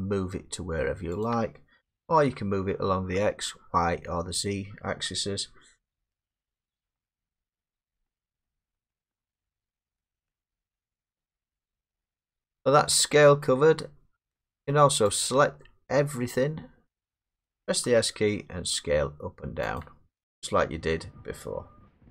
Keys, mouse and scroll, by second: 1.2 click, 2.1 ctrl+z, 5.8 middle click, 7.0 middle click, 7.4 middle click, 8.0 middle click, 9.5 middle click, 9.5 middle click, 9.6 middle click, 10.7 middle click, 10.7 scroll down 3, 11.9 middle click, 15.1 click, 16.9 middle click, 17.8 s, 19.8 click.